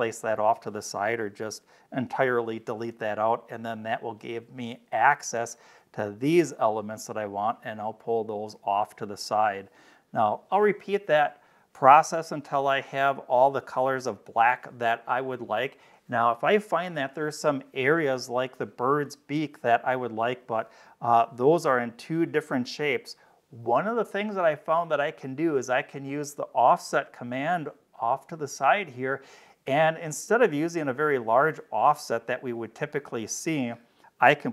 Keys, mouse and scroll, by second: 3.7-5.0 drag, 6.1-7.6 drag, 8.4 middle click, 8.4-8.8 scroll down 2, 9.6 click, 21.1 click, 32.6 click.